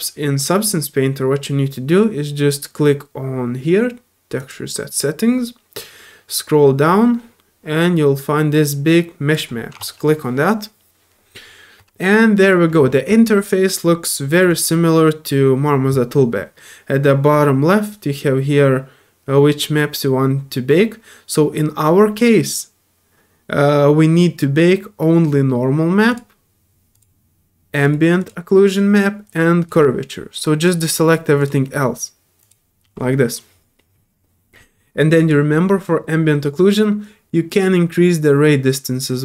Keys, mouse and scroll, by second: 4.4 click, 6.3 middle click, 6.8 middle click, 7.2 middle click, 9.3 click, 26.1 click, 26.9 click, 27.8 click, 28.2 click, 29.2 click, 29.6 click, 30.6 click, 31.1 click, 31.4 click, 32.4 click, 35.2 click, 37.6-39.2 drag.